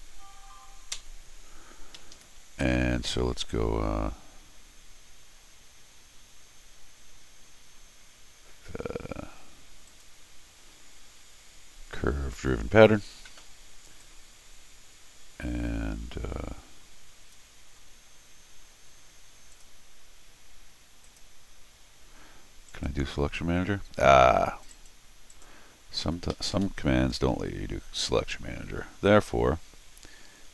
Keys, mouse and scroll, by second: 2.0 Escape, 2.2 Escape, 2.8 middle click, 9.9 click, 12.3 click, 14.0-17.3 drag, 19.5 click, 21.0 click, 22.7 right click, 24.6 click, 24.7 right click, 25.3 right click, 26.0 Escape, 26.3 Escape, 26.5 Escape.